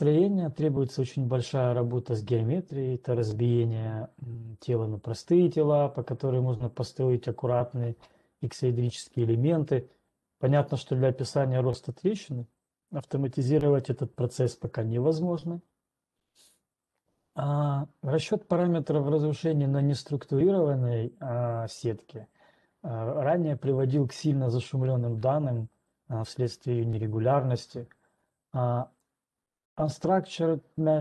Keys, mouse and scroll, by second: 29.6 click.